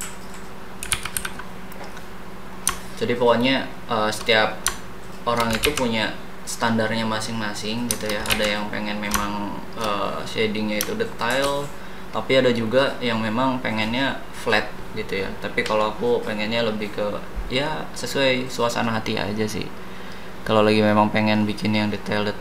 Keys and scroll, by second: 0.9 ctrl+c, 1.3 v, 5.6 ctrl+z, 8.3 ctrl+z.